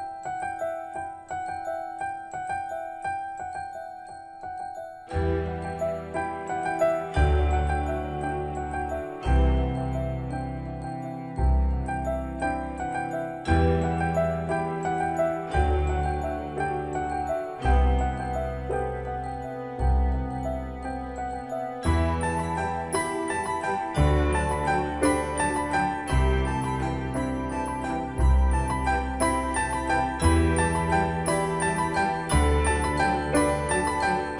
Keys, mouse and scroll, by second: 18.0-27.7 drag, 28.7 typing.